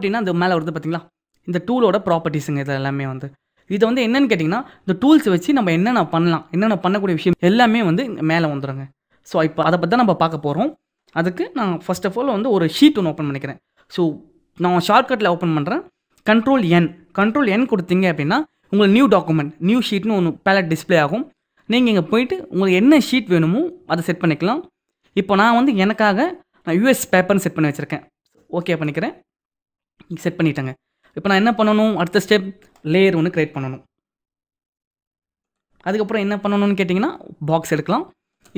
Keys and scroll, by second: 12.6 ctrl+n.